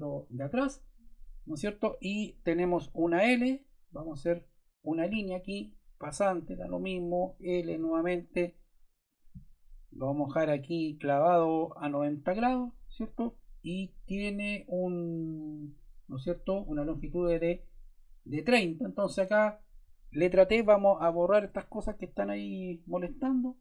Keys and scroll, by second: 2.9 l, 7.0 Escape, 7.6 l, 12.9 Escape, 20.4 t.